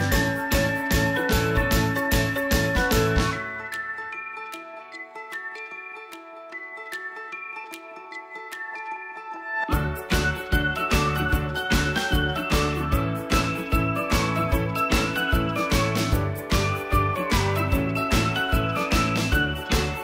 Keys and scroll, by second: 0.5 ctrl+v, 11.6 End, 18.8 p.